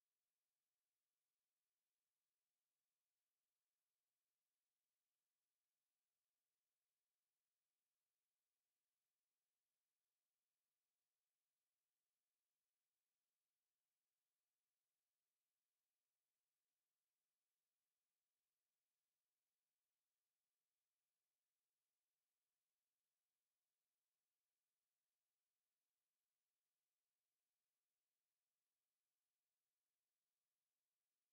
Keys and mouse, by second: 0.4 shift+click, 2.7 click, 3.8 shift+click, 4.5 shift+click, 6.0 shift+click, 7.0 shift+click, 7.4 alt+click, 8.8 shift+click, 9.4 shift+click, 9.9 shift+click, 10.3 shift+click, 10.7 alt+click, 11.2 shift+click, 11.6 alt+click, 12.9 alt+click, 13.5 alt+click, 13.6 alt+click, 14.3 alt+click, 15.1 shift+right click, 16.2 alt+click, 16.5 alt+right click, 17.5 ctrl+click, 18.9 ctrl+click, 21.0 alt+click, 21.5 alt+click, 21.9 alt+click, 23.7 alt+click, 24.4 alt+click, 24.9 alt+right click, 28.2 g, 29.7 ctrl+click.